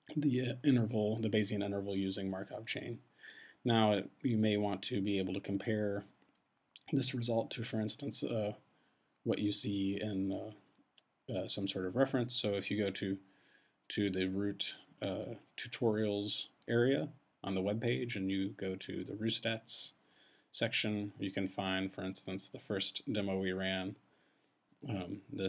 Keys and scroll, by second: 1.1 Return.